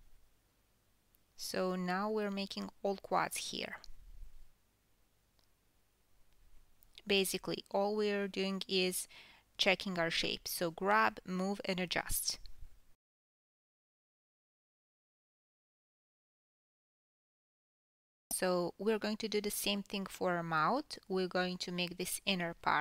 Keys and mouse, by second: 0.4 click, 0.6 KP_7, 1.1 g, 2.0 KP_7, 2.3 g, 3.2 drag, 3.4-4.8 middle drag, 4.6-5.7 typing, 4.8-5.1 drag, 5.1-5.5 middle drag, 5.5 drag, 5.6-12.4 middle drag, 7.7 f, 7.9 f, 9.1-11.9 typing, 9.6 shift+drag, 12.4-13.8 drag, 13.8 alt+middle click, 14.0 s, 14.5 alt+click, 14.7 alt+middle click, 14.8 alt+drag, 15.0-15.5 alt+shift+middle drag, 15.5 alt+shift+click, 15.8 middle click, 16.5-16.9 drag, 16.9-17.2 middle drag, 16.9 g, 17.2 click, 17.5-22.8 middle drag, 17.5 g, 18.0 g, 18.3 ctrl+s, 19.0 Tab, 22.3 click.